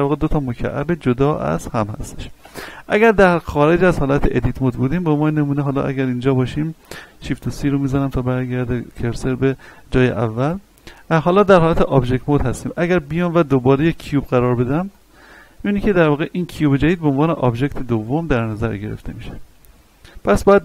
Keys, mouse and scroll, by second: 2.4 Tab, 3.1 scroll down 1, 3.7 middle click, 4.9-6.9 drag, 6.9 shift+c, 7.3-7.9 scroll up 2, 7.9 shift+middle click, 8.3 scroll down 1, 10.4-13.2 drag, 13.2 shift+a, 14.9 click, 19.2 click.